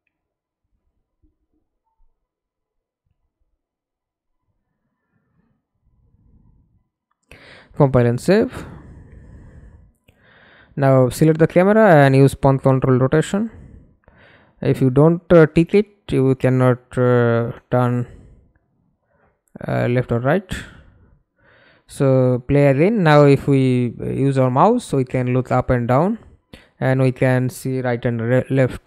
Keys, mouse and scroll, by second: 6.0-6.4 scroll down 1, 6.4-9.3 scroll up 1, 19.6 middle click, 20.4 F11, 21.3 alt+p, 27.3-28.4 typing.